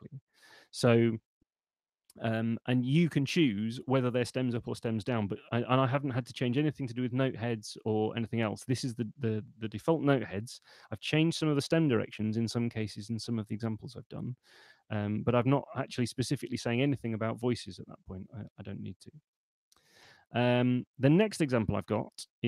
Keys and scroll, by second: 10.4 Escape, 15.6 BackSpace.